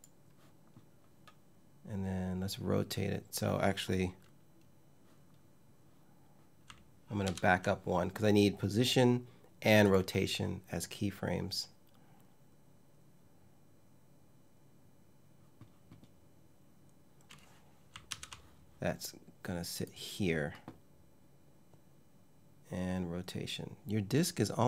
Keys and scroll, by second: 6.9 super+z, 17.7 super+z.